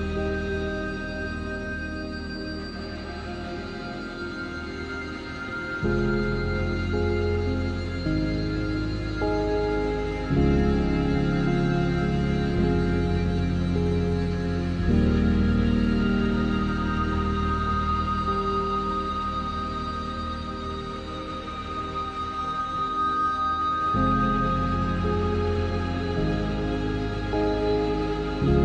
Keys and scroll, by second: 0.3 x, 0.6 z, 6.6 3, 8.0 Tab, 11.8 ctrl+s, 12.3 z, 15.7 Tab, 16.1 ctrl+r, 19.2 7, 20.5 7.